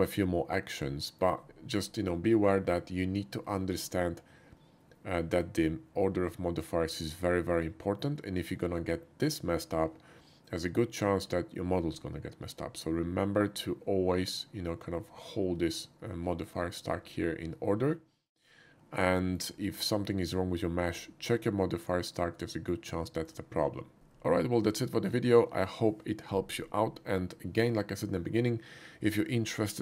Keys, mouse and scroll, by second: 1.1 shift+middle click, 1.8-2.8 shift+middle drag, 3.0-3.6 shift+middle drag, 3.8 shift+middle drag, 10.6-11.2 middle drag, 19.2 shift+middle click, 19.6-20.9 shift+middle drag, 22.2 shift+middle click, 23.1 shift+middle click.